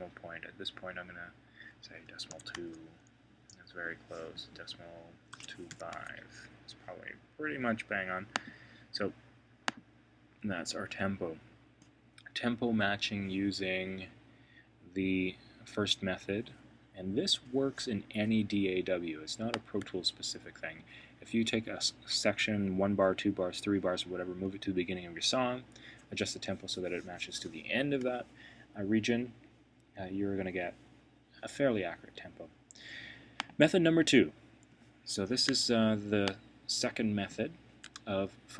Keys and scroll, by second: 2.5 Return, 5.9 Return.